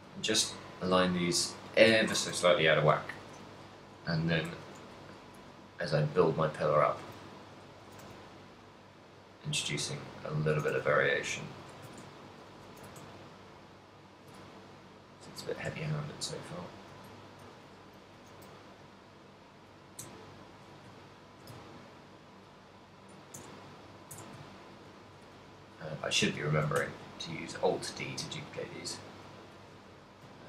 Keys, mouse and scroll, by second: 0.4 right click, 0.8 r, 1.4 shift+click, 2.4 KP_1, 3.2 d, 4.6 alt+d, 7.1 click, 7.3 shift+middle click, 7.8 r, 9.8 click, 9.8 r, 10.6 r, 11.7 click, 11.8 g, 12.8 click, 12.8 r, 14.3 shift+click, 14.5 r, 15.6 g, 17.2 click, 17.4 g, 18.1 click, 18.2 r, 19.9 g, 20.6 shift+click, 21.1 shift+middle click, 21.9 ctrl+middle click, 23.6 Tab, 24.2 Tab, 24.4 shift+middle click, 25.1 right click, 25.2 x, 26.1 right click, 26.6 alt+d, 29.7 shift+click, 30.1 r.